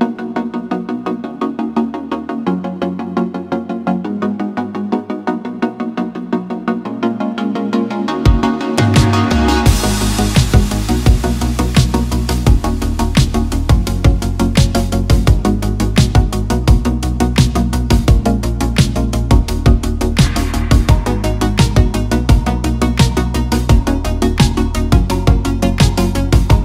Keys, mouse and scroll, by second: 0.9 Tab, 1.4 click, 2.1 drag, 2.2 click, 2.7 Tab, 2.8 click, 3.1 click, 3.4 click, 3.6 click, 4.0 Tab, 4.7 ctrl+click, 4.9 ctrl+click, 5.2 shift+click, 5.5 shift+click, 5.7 ctrl+click, 6.1 click, 6.3 shift+click, 7.2 shift+click, 9.1 KP_1, 9.8 middle click, 10.6 e, 11.2 click, 12.2 click, 12.7 click, 13.6 KP_1, 14.7-15.4 super+z, 15.6 super+z, 16.6 middle click, 16.8 middle click, 17.1 middle click, 17.7 middle click, 18.0 click, 18.2 shift+click, 18.6 click, 19.0 middle click, 19.1 click, 19.4 e, 20.2 click, 20.6 click, 21.0 click, 21.5 middle click, 22.4 click, 22.9 KP_1, 23.5 click, 24.2 click, 24.8 click, 25.9 middle click, 26.5-26.6 drag.